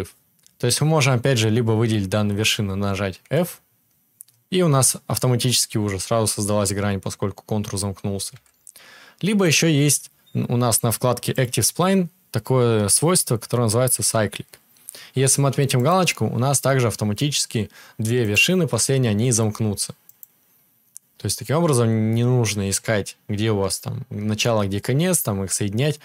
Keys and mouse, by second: 3.2 f, 8.3 ctrl+z, 15.8-18.2 middle drag, 18.2 click, 19.2-26.0 middle drag, 19.2 g.